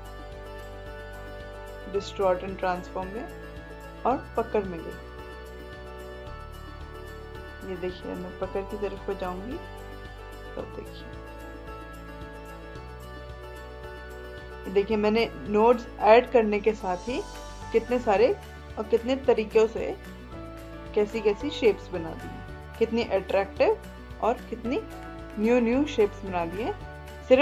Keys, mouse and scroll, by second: 4.3-11.7 drag.